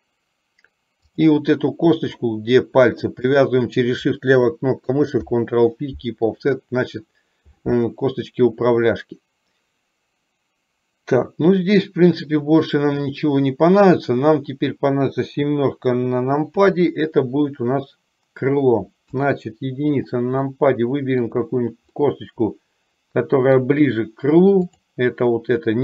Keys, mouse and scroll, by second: 5.3 ctrl+p, 16.7 KP_7, 20.7 middle click, 22.2-23.8 middle drag, 24.8 click.